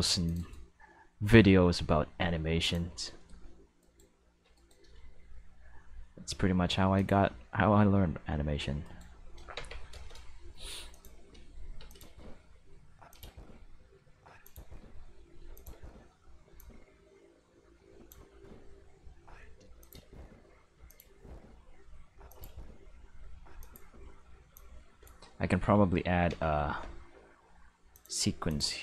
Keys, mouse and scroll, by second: 0.2 click, 0.4 right click, 0.7 g, 2.6 click, 3.8 right click, 4.5 shift+right click, 4.9 g, 6.9 click, 8.0 r, 8.8 right click, 10.0 shift+middle click, 10.9 click, 11.1-16.4 typing, 11.9 click, 13.1 click, 14.4 click, 15.5 click, 16.5-18.1 drag, 18.3 space, 19.0-19.5 middle drag, 19.5 space, 19.8 click, 19.9 space, 20.7 space, 20.9 click, 21.0 space, 22.1-24.5 typing, 22.3 click, 23.6 click, 24.5-25.0 drag, 25.6 Tab, 26.3 a, 27.9 click, 28.5 click.